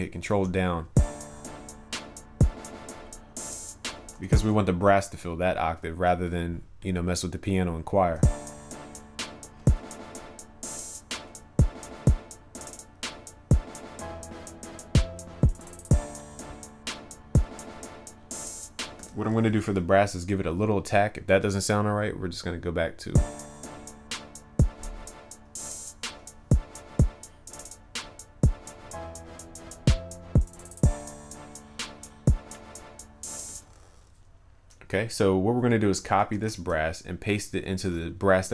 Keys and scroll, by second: 0.4 ctrl+Down, 4.3 ctrl+s, 36.3 ctrl+c, 37.9 ctrl+v.